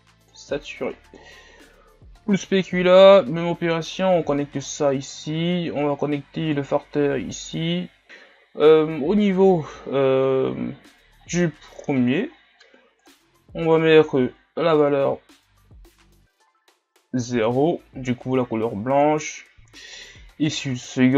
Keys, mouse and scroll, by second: 4.7-6.5 scroll down 5, 6.5-8.0 drag, 8.0-10.3 scroll up 3, 10.3-11.7 scroll up 1, 11.7-12.3 scroll up 1.